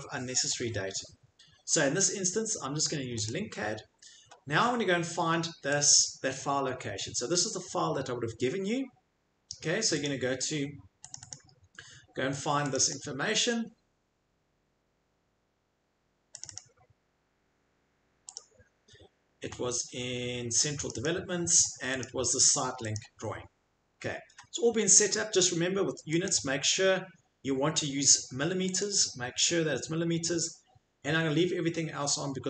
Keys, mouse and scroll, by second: 3.2 click, 5.8 click, 10.0 click, 11.1 click, 11.3 click, 12.7 click, 12.9 click, 14.5 middle click, 16.4 click, 16.5 click, 18.4 click, 19.4 middle click, 20.8 click, 21.1 click, 22.0 click, 22.9 click, 26.2 click, 28.8 click.